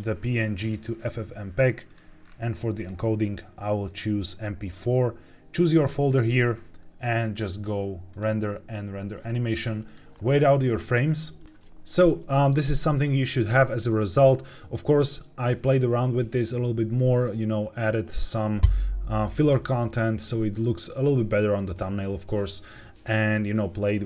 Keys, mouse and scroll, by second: 1.8 click, 2.1-2.6 scroll down 2, 2.7-3.9 drag, 8.0-9.6 drag.